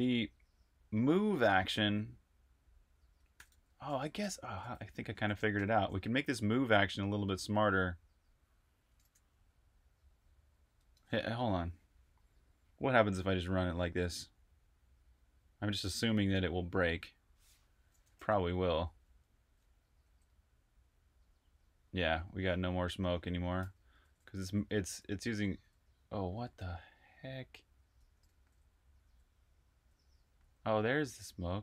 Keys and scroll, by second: 2.9-5.7 typing, 10.8 super+r, 11.1-12.0 typing, 18.6 l, 19.9 s, 21.5-31.1 typing.